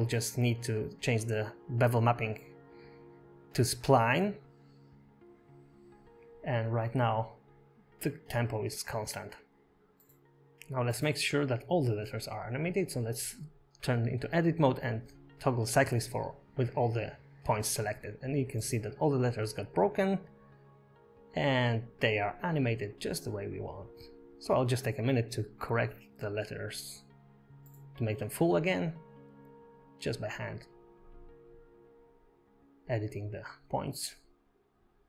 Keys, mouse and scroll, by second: 3.8 click, 8.3 click, 8.9 space, 12.5 space, 13.8 shift+Tab, 13.8 click, 13.8 scroll down 4, 14.0 shift+middle click, 14.7 shift+middle click, 15.0 click, 16.4 right click, 17.9 Tab, 18.2 middle click, 18.7 scroll down 1, 18.9 middle click, 19.1-22.1 typing, 19.6 click, 20.7 middle click, 21.4 scroll down 8, 21.8 shift+middle click, 24.1 scroll up 8, 24.3 Tab, 24.3 shift+middle click, 24.3 scroll down 1, 24.4 click, 24.7-32.8 typing, 25.3 shift+middle click, 25.4 scroll up 2, 26.0 scroll down 6, 26.1 shift+middle click, 26.3 click, 27.2 ctrl+z, 27.3 click, 27.8 scroll down 4, 27.9 shift+middle click, 27.9 scroll up 3, 28.1 click, 29.9 scroll up 4, 30.1 scroll down 4, 30.2 click, 30.7 click, 31.3 ctrl+z, 33.9 click, 34.1 click, 34.5 Tab, 34.8 Tab, 34.8 click, 34.9 e.